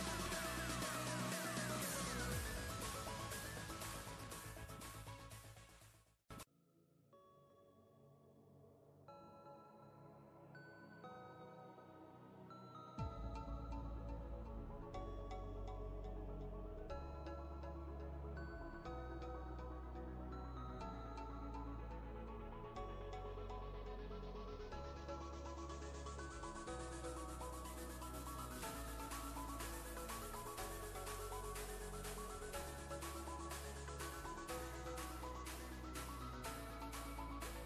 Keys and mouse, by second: 1.5 click, 1.5 ctrl+space, 1.6 ctrl+click, 1.8 click, 2.4-3.0 click, 3.1 click, 3.4 click, 3.9 click, 5.2 ctrl+alt+2, 5.3 click, 5.3 click, 10.7-16.9 drag, 12.5-12.9 click, 16.3-16.8 click, 21.0 click, 27.4 click, 31.2 click, 36.1-37.6 typing.